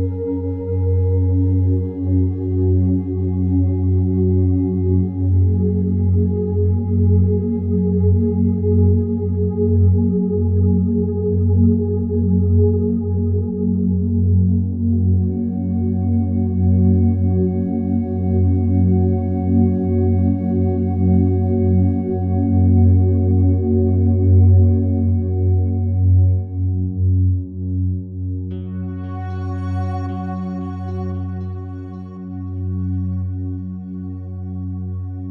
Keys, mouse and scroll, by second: 2.1 click, 2.8-4.4 alt+drag, 4.4 3, 4.7 right click, 5.9 click, 7.4 ctrl+z, 10.2-15.0 drag, 15.0 a, 16.1 s, 16.3 x, 19.3 ctrl+x, 23.1 ctrl+click, 23.7 a, 23.9 a, 24.2-27.3 alt+drag, 27.3 right click, 29.3 e, 35.1 click.